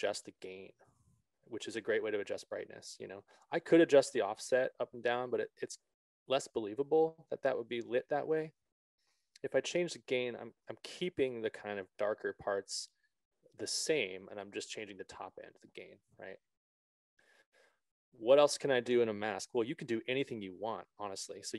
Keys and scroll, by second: 9.5 ctrl+z.